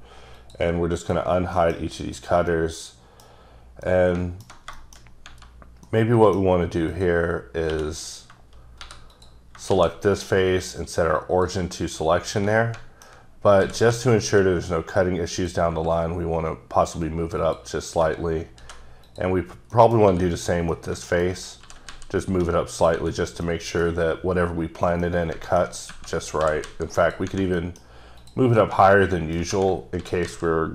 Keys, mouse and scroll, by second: 0.4 click, 1.0 click, 1.6 middle click, 2.1 click, 2.8 middle click, 3.6 scroll up 2, 3.9 middle click, 5.0 scroll up 1, 5.9 middle click, 6.9 click, 7.7 click, 8.1 click, 8.8 3, 9.1 click, 9.7 shift+s, 11.2 click, 12.6 middle click, 13.4 scroll up 2, 13.6 g, 13.9 z, 15.4 click, 17.4 click, 18.6 2, 19.1 click, 19.7 middle click, 20.1 3, 20.3 click, 20.7 middle click, 21.5 scroll up 1, 21.6 g, 21.9 z, 22.7 click, 23.2-23.5 scroll down 3, 23.5 middle click, 25.0 middle click, 26.0-26.4 scroll up 2, 26.4 g, 27.0 click, 27.6 middle click, 28.2 click, 28.6 middle click, 30.0 g, 30.3 z.